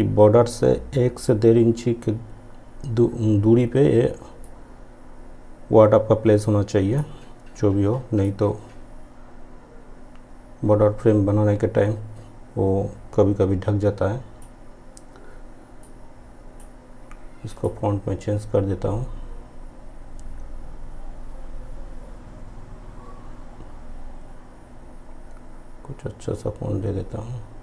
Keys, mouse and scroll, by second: 4.6-17.6 drag.